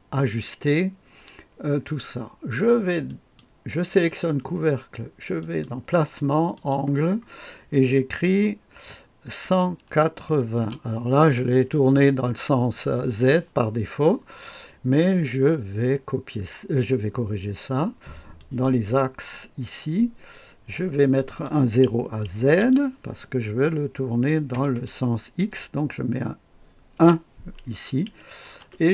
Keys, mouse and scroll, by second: 3.0 click, 5.3 click, 6.5 click, 9.4 KP_1, 9.8 KP_8, 10.5 KP_0, 18.3 click, 21.2 click, 22.5 KP_0, 24.5 click, 25.3 click, 26.9 KP_1, 28.5 Return.